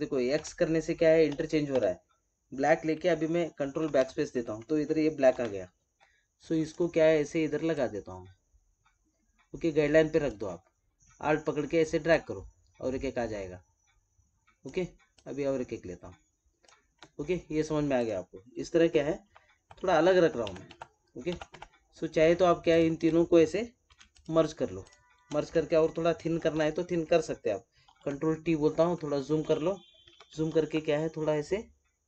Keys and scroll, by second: 3.7 ctrl+BackSpace, 5.2 ctrl+d, 26.3 ctrl+e, 27.8 ctrl+t, 30.0 ctrl+=.